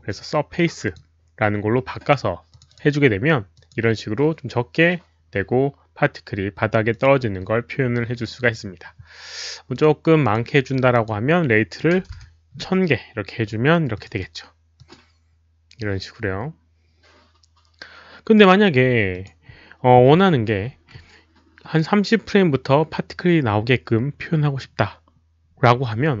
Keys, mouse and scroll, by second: 0.8 click, 2.5 click, 2.6 click, 3.5 click, 5.8 click, 6.9 click, 9.7 click, 10.2 click, 10.9 click, 12.0 KP_0, 12.1 Return, 13.9 Return, 13.9 click, 13.9 KP_0, 14.1 click, 14.7 Return, 14.7 click, 14.7 KP_0, 17.0 Return, 17.0 click, 17.0 KP_0, 17.5 Return, 17.5 click, 17.5 KP_0, 19.0 Return, 19.0 KP_0, 19.2 click, 24.9 click.